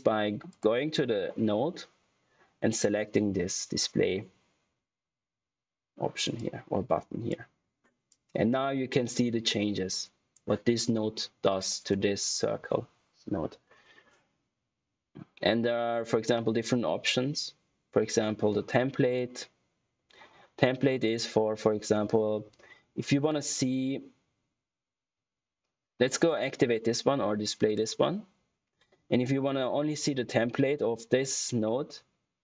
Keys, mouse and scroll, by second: 0.4 click, 1.4 scroll up 1, 6.3 click, 27.9 click.